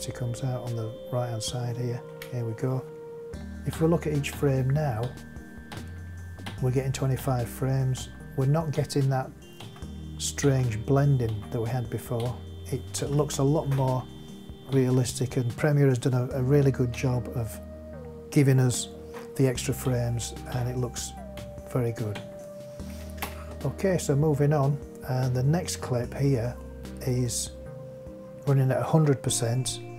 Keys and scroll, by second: 2.1 space, 3.7 Right, 15.8 Right, 16.9 Right, 19.8 Right, 23.2 space.